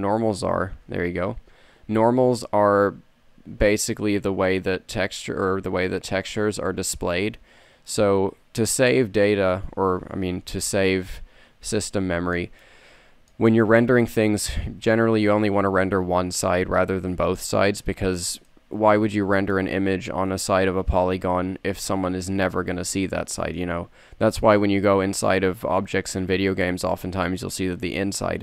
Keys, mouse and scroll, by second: 0.6 ctrl+n.